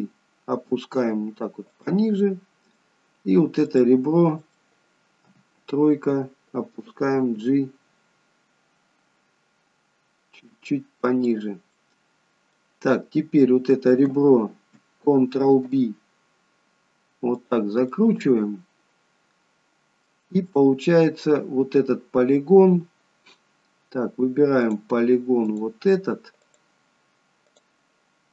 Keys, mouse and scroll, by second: 2.3 middle click, 3.7 click, 4.5 middle click, 5.3 KP_3, 7.2 g, 11.8 middle click, 15.6 ctrl+b, 18.0 middle click, 20.5 middle click, 24.7 click, 25.6 click.